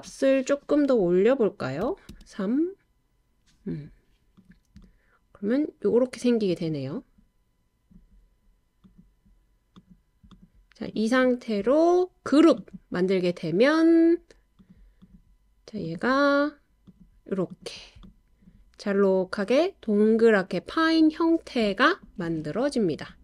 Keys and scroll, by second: 1.6-2.3 typing, 4.8-8.0 typing.